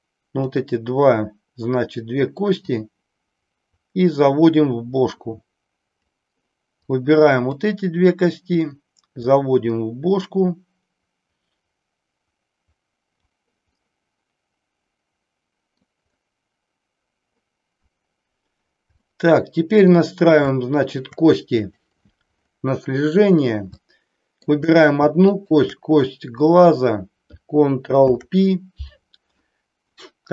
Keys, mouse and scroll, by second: 0.0 click, 2.6 click, 7.1 click, 9.1 click, 13.8-15.7 middle drag, 19.0-20.0 middle drag, 20.6 shift+middle click, 21.6 click, 23.7 shift+middle click, 25.2 shift+click, 27.9 ctrl+p.